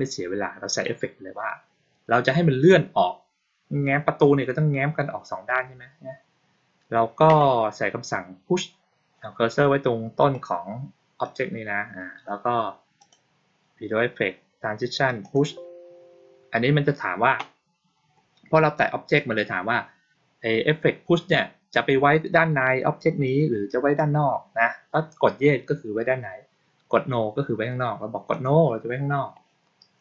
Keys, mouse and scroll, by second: 10.1 right click, 11.1 click, 12.9 click, 15.1 click, 28.2 click.